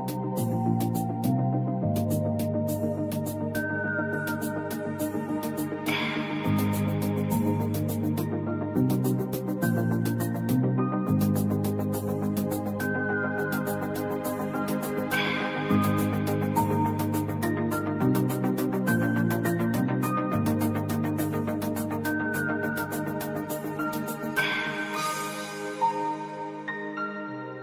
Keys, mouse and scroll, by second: 2.5-6.2 drag, 6.2 alt+shift+Down, 7.1 alt+shift+Down, 7.9 ctrl+z, 9.0 shift+Down, 13.4 click, 13.8 scroll down 1, 15.0 click, 16.9-27.6 typing, 27.2 Return.